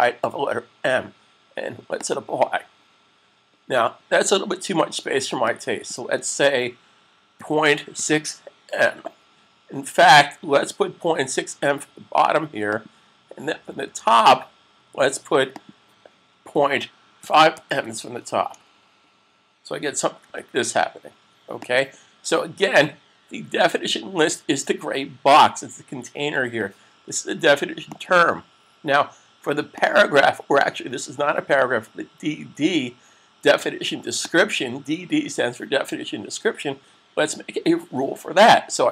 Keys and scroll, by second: 7.2-8.0 typing, 16.8-18.1 typing, 20.0 s.